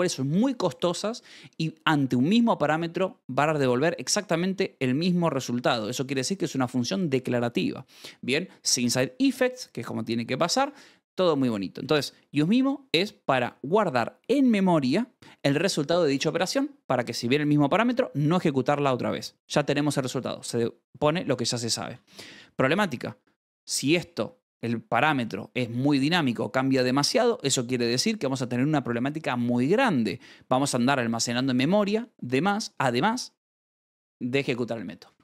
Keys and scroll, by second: 5.6 Escape, 11.5-12.4 typing, 18.9 Escape, 21.8 v, 27.3 Escape, 29.9-30.8 typing, 35.0 Escape.